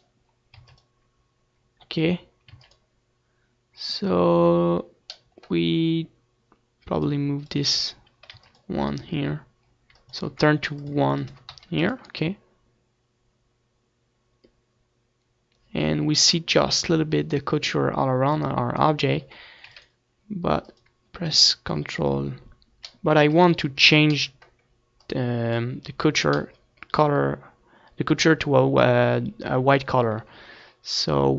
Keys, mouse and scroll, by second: 0.4 ctrl+s, 2.4 ctrl+s, 6.9-8.6 drag, 8.3 ctrl+s, 9.9-13.0 drag, 18.4-20.1 drag, 19.8 ctrl+s, 20.9-22.5 drag, 21.3 ctrl+s, 23.3 ctrl+s, 25.2-27.0 drag, 27.0-30.3 middle drag, 30.3 shift+a.